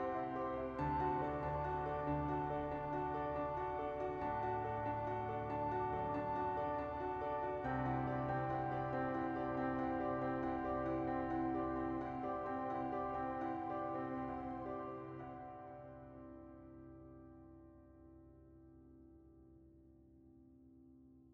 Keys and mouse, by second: 1.2 shift+middle click, 1.8 s, 2.5 shift+middle click, 2.7 Tab, 2.9 shift+middle click, 3.6 ctrl+r, 3.9 ctrl+z, 4.2 ctrl+b, 5.9 alt+click, 6.4 s, 8.7 alt+click, 9.2 click, 9.3 middle click, 10.7 ctrl+b, 14.4 Tab, 14.9-16.1 middle drag, 16.4 middle click, 17.6 middle click, 18.8 KP_1, 19.2 middle click, 20.2 middle click.